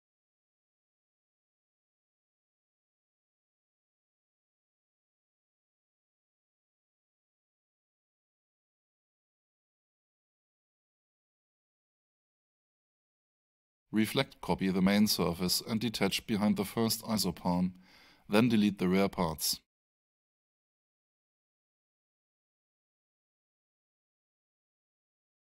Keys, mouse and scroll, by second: 3.8 click, 5.6 click, 6.4 click, 12.7 click, 18.2 click, 23.0 click.